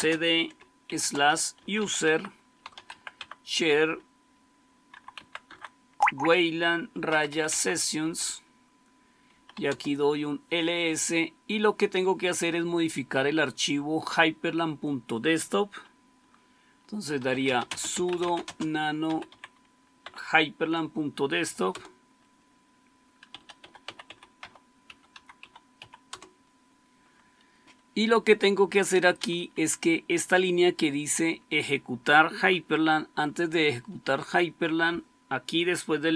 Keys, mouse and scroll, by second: 0.0-3.3 typing, 4.6-5.5 typing, 6.6-7.9 typing, 9.0-9.9 typing, 16.8-19.7 typing, 19.9 Tab, 21.6 Return, 23.2-26.2 typing, 28.8 Down, 29.1 Down, 29.3 Down, 33.1 Right, 33.4 Right, 33.6 Right, 33.8 Right, 34.0 Right.